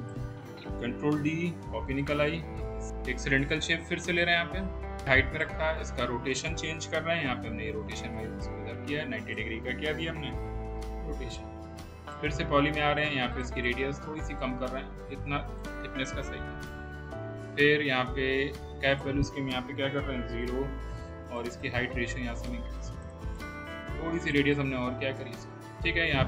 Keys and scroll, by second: 0.2 w, 1.3 ctrl+d, 7.2 e, 10.4 0, 10.7 Return, 20.0 0, 20.1 Return.